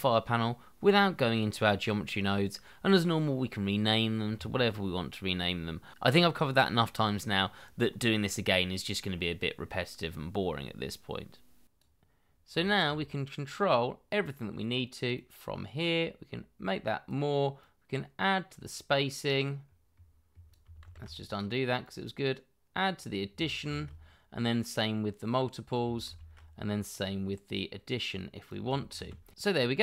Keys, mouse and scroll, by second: 0.3 double click, 0.5-1.1 typing, 1.1 Return, 1.3 shift+middle click, 2.1 shift+middle click, 3.7 scroll down 1, 3.9 double click, 5.8-10.7 typing, 8.1 double click, 12.6 shift+middle click, 14.4-15.3 scroll up 1, 20.8 ctrl+z, 23.6 ctrl+z, 26.0 ctrl+z, 28.9 ctrl+z.